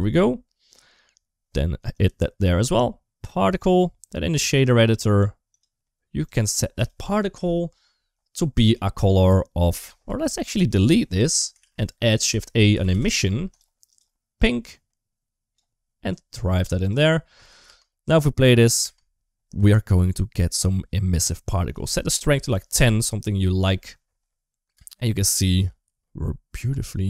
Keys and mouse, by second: 1.8-3.4 drag, 4.3 click, 5.4 click, 6.6 click, 7.2 Home, 8.5 middle click, 9.0 click, 10.4 middle click, 10.6 click, 11.1 Delete, 11.4 shift+a, 13.8 click, 15.9 click, 17.5 space, 18.7 space, 20.3 click, 21.5-22.6 drag, 24.6 space, 26.5 middle click, 26.8 middle click.